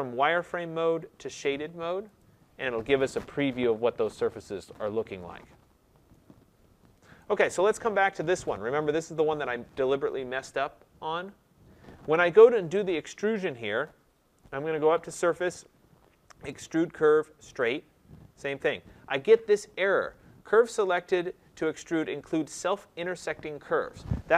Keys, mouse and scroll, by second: 2.2 click, 5.6 middle click, 7.2 middle click, 7.2 right click, 8.4 click, 15.0 click, 17.5 click.